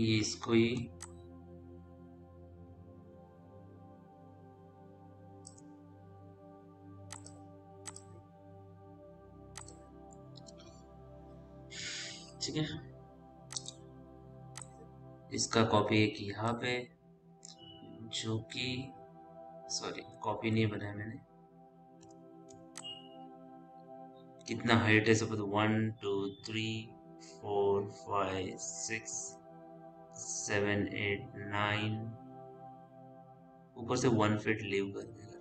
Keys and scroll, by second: 14.8 Caps_Lock, 20.9 ctrl+z, 21.4 Caps_Lock.